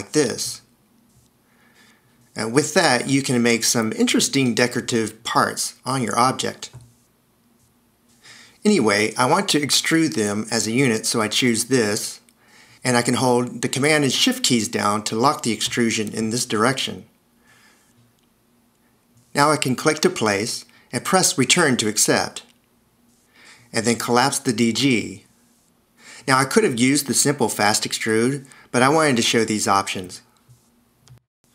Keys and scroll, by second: 22.9 Return, 31.3 h.